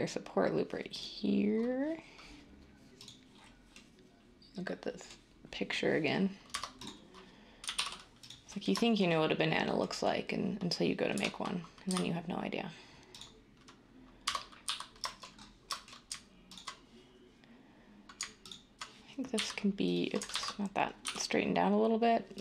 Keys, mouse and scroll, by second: 6.5 Tab, 7.6 typing, 11.1-12.3 typing, 14.2 Tab, 14.4-15.1 typing, 19.3 e, 20.3 ctrl+z, 22.3 r.